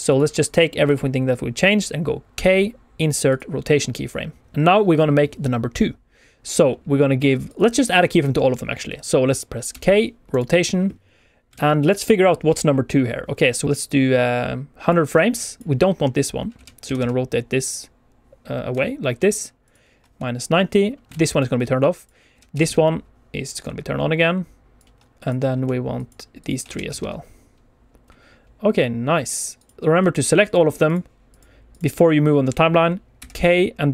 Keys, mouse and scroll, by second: 0.0 shift+click, 0.3 shift+click, 2.2 k, 7.4 shift+click, 7.7 shift+click, 9.6 k, 11.5 alt+a, 11.7 click, 13.6 click, 15.6 right click, 15.6 d, 16.5 r, 16.8 x, 16.9 x, 19.6 ctrl+click, 21.0 alt+a, 21.0 click, 21.2 click, 21.9 click, 22.3 r, 22.5 x, 22.6 x, 24.7 ctrl+click, 25.1 click, 25.9 shift+click, 26.3 shift+click, 26.6 r, 26.8 x, 26.9 x, 29.7 ctrl+click, 29.9 click, 30.4 shift+click, 30.8 shift+click, 31.2 shift+click, 31.6 shift+click, 33.0 k.